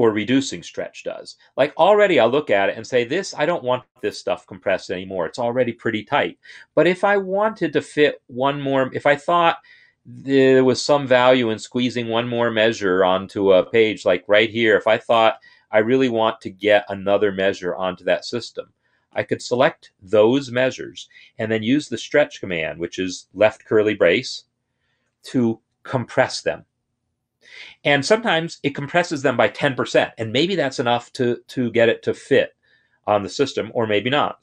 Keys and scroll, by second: 24.3 shift+[.